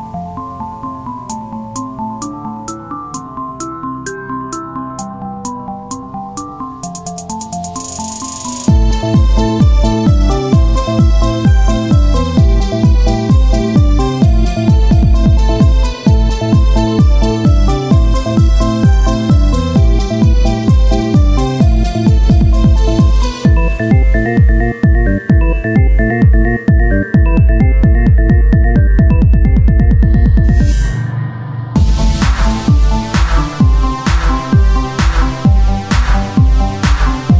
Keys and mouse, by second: 4.0-5.3 drag, 5.9 e, 7.1 click, 7.8 KP_1, 7.9 click, 8.2 z, 11.9-14.1 drag, 19.0 g, 20.3-21.5 drag, 22.2 z, 24.9 r, 25.8 Tab, 29.2 Tab, 30.1 e, 31.7-33.4 drag, 33.4 KP_1, 33.6 z, 34.5 KP_1, 35.7 z, 36.7 e.